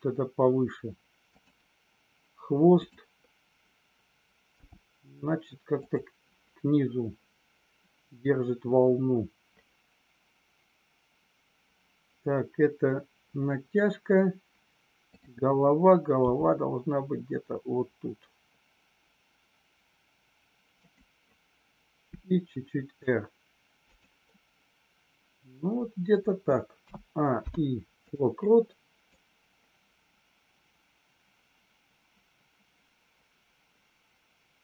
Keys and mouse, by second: 2.8 click, 20.7 click, 22.2 r, 23.8 click, 26.8 a, 27.3 i, 29.2-34.6 drag.